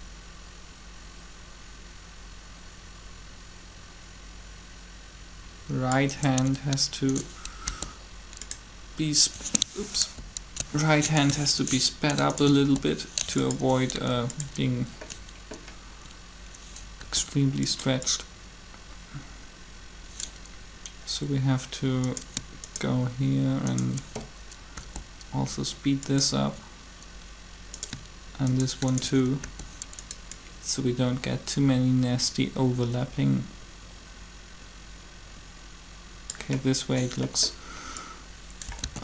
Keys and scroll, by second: 7.7 shift+g, 10.0 ctrl+z, 12.6 shift+g, 13.9 g, 16.9 g, 24.7 shift+g, 29.2 shift+g, 38.8 alt+a.